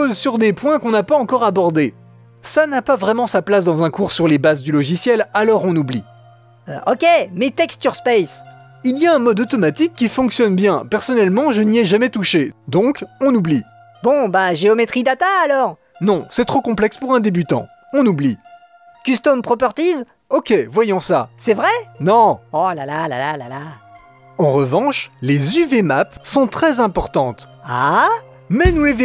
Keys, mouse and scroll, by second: 1.2-3.1 scroll down 2, 4.8-6.3 middle drag, 7.5 click, 7.9-9.1 scroll down 4, 9.1-9.8 scroll down 2, 9.8 click, 10.1-11.7 drag, 13.3-15.6 drag, 15.6-16.1 scroll down 6, 19.5 click, 19.6 scroll down 3, 23.9-27.1 drag.